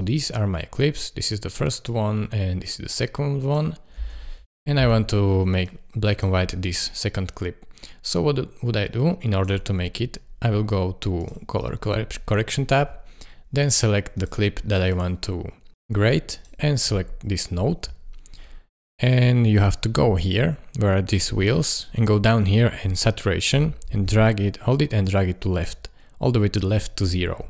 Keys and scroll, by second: 4.0 space.